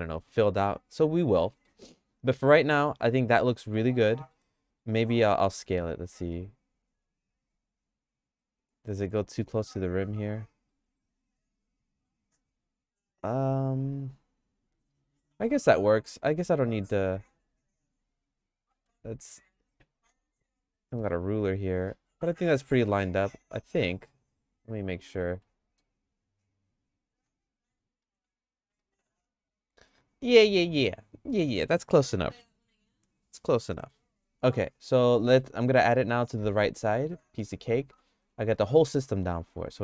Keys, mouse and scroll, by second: 0.7 middle click, 1.5 middle click, 1.8 shift+middle click, 3.5 middle click, 4.1 middle click, 4.6 shift+middle click, 5.7 s, 9.2 middle click, 10.7 middle click, 11.0-15.4 shift+middle drag, 16.1 click, 16.8 w, 17.7 right click, 18.8 s, 21.0 Tab, 22.1 Tab, 23.2 click, 25.2 t, 25.8 click, 26.8 click, 27.6 t, 28.0 middle click, 28.8 middle click, 29.9-31.6 middle drag, 34.9 middle click, 35.3 shift+middle click, 35.9 middle click, 36.6 middle click, 37.1 shift+middle click, 37.9 Tab, 38.2 Tab, 38.6 click.